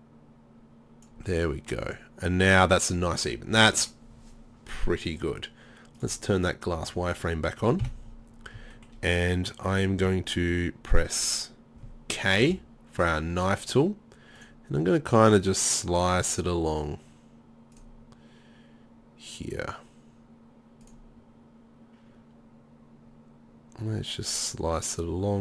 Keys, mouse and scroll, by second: 0.8 right click, 3.0 middle click, 3.6 middle click, 6.0 click, 7.0 middle click, 7.8 KP_7, 12.5 k.